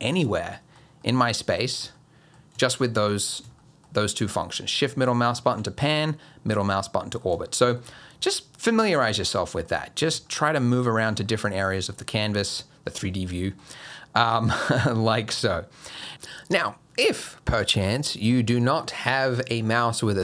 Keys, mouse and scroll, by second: 0.4 shift+middle click, 1.0 shift+middle click, 1.5 middle click, 1.9 middle click, 2.6 shift+middle click, 3.1 middle click, 3.6 shift+middle click, 4.0 shift+middle click, 4.5 shift+middle click, 5.7 middle click, 7.5 shift+middle click, 9.0-9.3 scroll down 1, 9.3 middle click, 9.8 middle click, 10.3 shift+middle click, 10.8 shift+middle click, 11.2 middle click, 11.9 shift+middle click, 12.5 middle click, 13.3 shift+middle click, 13.8 shift+middle click, 14.3 middle click, 15.0 shift+middle click, 15.5 middle click.